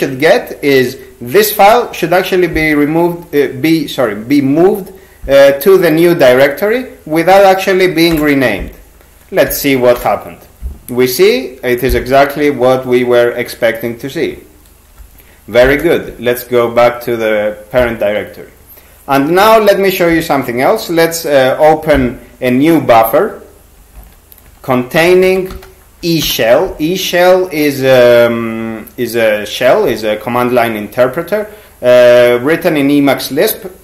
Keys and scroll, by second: 8.1 Return, 9.5 Up, 10.0 Return, 15.6 ^, 24.0 alt+x, 24.8-26.0 typing, 26.2 Return.